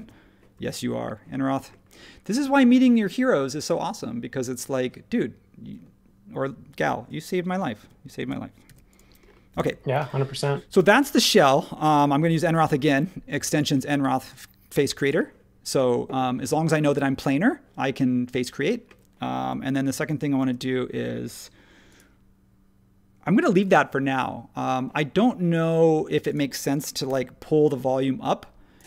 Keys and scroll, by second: 7.8 super+1, 8.6 super+s, 20.4 super+1, 27.0 p.